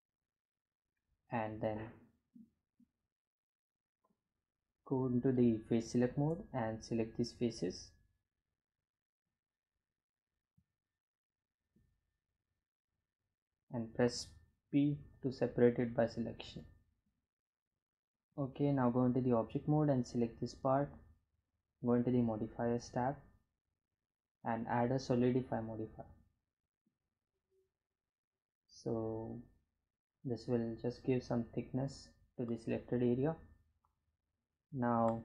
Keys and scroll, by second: 6.3 3, 14.5 p, 17.8 Tab.